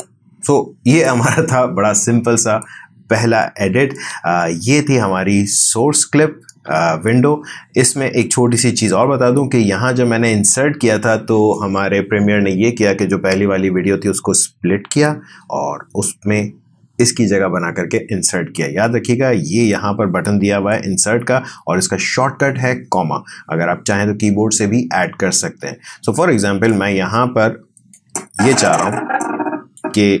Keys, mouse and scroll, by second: 28.3-30.2 drag.